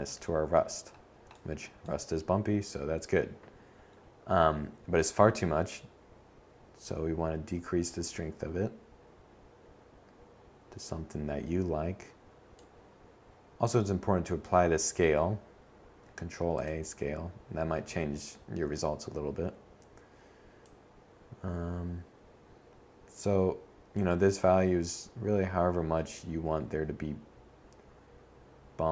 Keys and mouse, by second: 7.5 middle click, 13.6 ctrl+a.